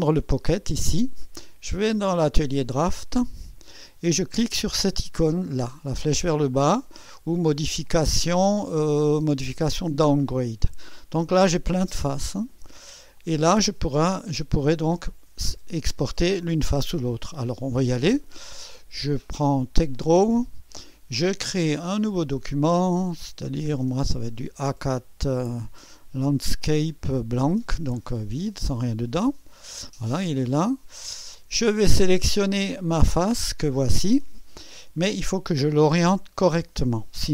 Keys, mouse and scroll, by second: 0.0-1.1 drag, 1.9-3.6 drag, 7.9 click, 10.1 click, 13.2 click, 17.5-18.1 scroll down 2, 18.1-18.8 scroll down 1, 19.1 click, 20.0 click, 22.3 click, 23.2 click, 23.3-26.4 scroll down 2, 27.4 click, 29.1 click, 29.9 drag, 30.7 click, 32.2-33.9 drag, 34.3 click.